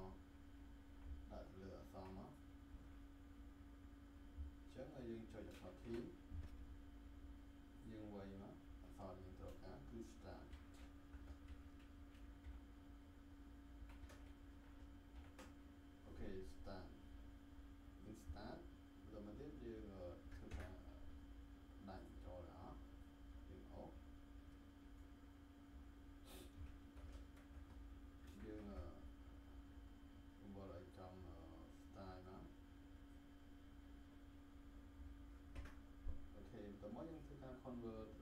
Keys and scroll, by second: 5.8 t, 10.5 s, 11.1 BackSpace, 11.4 s, 12.4 shift+t, 13.7 shift+r, 13.9 a, 15.1 t, 20.5 Return, 28.2 ctrl+shift+t, 35.5 Return.